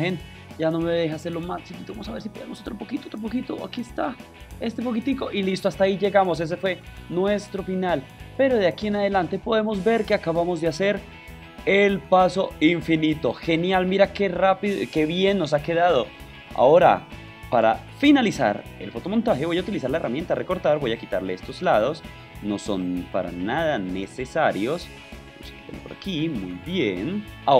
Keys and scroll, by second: 0.1 super+t, 0.7 shift+super+t, 15.0 super+v, 15.2 super+0.